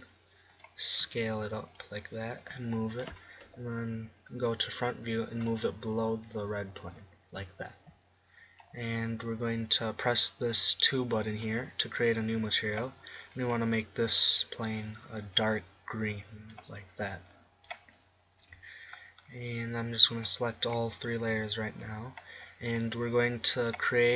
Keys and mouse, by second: 1.4-2.8 drag, 1.8 s, 3.2 g, 4.2 KP_1, 7.1 KP_0, 10.3-11.7 middle drag, 11.7-15.4 drag, 21.1-23.4 middle drag, 23.7-24.1 middle drag.